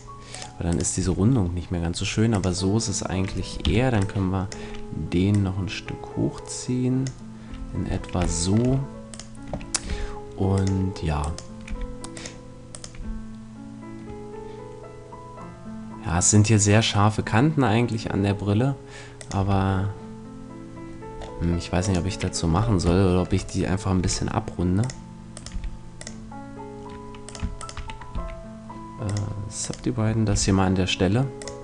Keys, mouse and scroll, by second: 1.0 a, 2.7-4.1 drag, 3.6 b, 5.3-7.0 drag, 7.5 a, 7.9-10.5 middle drag, 9.9 g, 10.5 right click, 11.2-14.5 right drag, 11.7 g, 12.2-14.1 drag, 12.7-14.1 middle drag, 12.9 g, 19.3-20.9 drag, 19.4 a, 21.8-23.4 right drag, 23.1 middle click, 24.0 g, 24.9 click, 25.5 g, 27.4 click, 27.9-29.5 right drag, 28.1 w, 29.7 right click, 30.3 g, 31.5-31.6 drag.